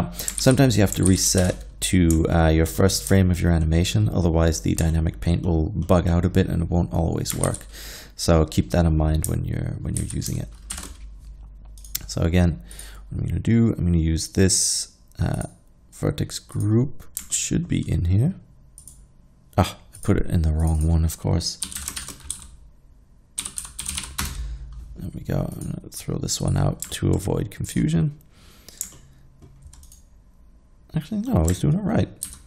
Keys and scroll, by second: 0.4 alt+a, 1.1 alt+a, 1.4 shift+Left, 7.5 alt+a, 10.1 alt+a, 10.8 shift+Left, 21.7-24.0 typing, 24.3 Return, 32.3 ctrl+z.